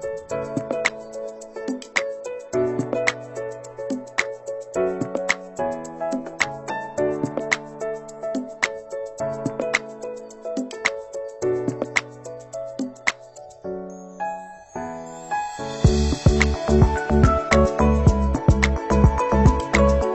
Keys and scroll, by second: 2.1 ctrl+c, 2.3 ctrl+v, 13.2 ctrl+=, 15.1 ctrl+-.